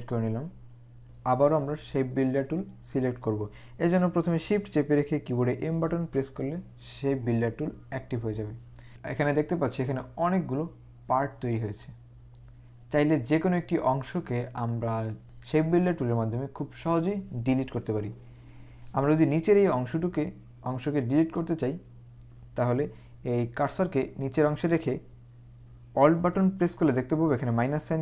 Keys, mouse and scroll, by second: 5.8 shift+m.